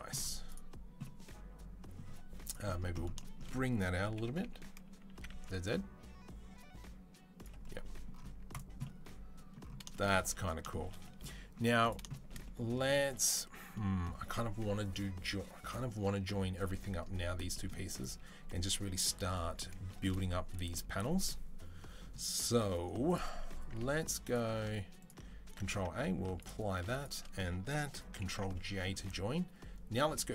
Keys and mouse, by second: 2.3 click, 3.0-11.7 shift+middle drag, 3.9 g, 11.7 click, 11.7-12.9 shift+middle drag, 12.9-13.5 drag, 13.5-17.8 middle drag, 17.8 click, 17.9-22.9 middle drag, 22.9 click, 23.9 middle drag, 24.1 click, 24.3-24.8 middle drag, 24.8 click, 25.1-26.3 ctrl+middle drag, 25.3 ctrl+a, 26.3-26.7 drag, 26.7 shift+middle click, 26.8 shift+drag, 27.0-28.2 ctrl+middle drag, 28.2 ctrl+j.